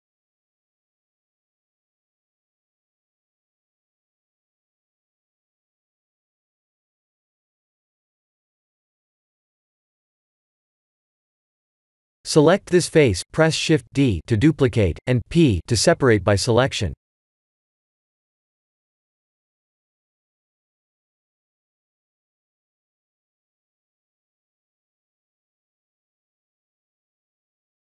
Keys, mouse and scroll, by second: 0.3 right click, 0.7 right click, 1.2 right click, 3.8 middle click, 5.5 middle click, 6.0 middle click, 6.9 middle click, 7.5 middle click, 8.0 middle click, 9.3 Tab, 9.9 x, 10.5 Tab, 10.8 click, 11.5 Tab, 12.0 3, 12.3 click, 13.3 shift+d, 17.4 p, 18.4 Tab, 18.7 3, 19.0 click, 20.2 Tab, 20.5 a, 21.8 right click, 22.1 right click, 23.2 right click, 23.7 ctrl+z, 24.0 ctrl+z, 24.1 ctrl+z, 25.2 Tab, 25.9 ctrl+a.